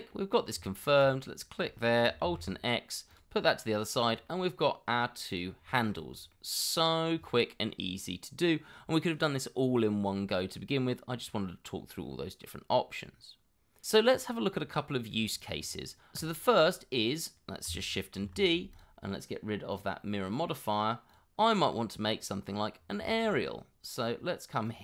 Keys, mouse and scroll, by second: 0.3 scroll down 1, 0.7 shift+middle click, 1.0 shift+click, 2.2 alt+x, 3.6-4.2 scroll down 1, 4.3 middle click, 4.9 scroll up 1, 5.7 shift+middle click, 6.0 scroll up 1, 6.3 middle click, 11.7 middle click, 14.1 scroll down 1, 16.4 scroll down 1, 16.7 middle click, 18.2 shift+d, 21.7 middle click, 23.0 shift+middle click, 24.6 scroll up 1.